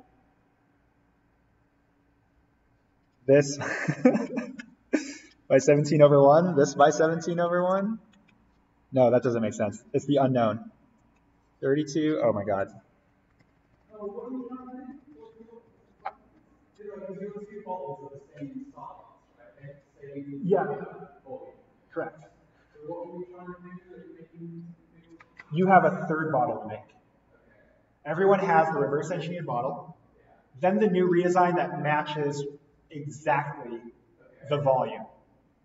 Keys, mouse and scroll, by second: 13.4 ctrl+z.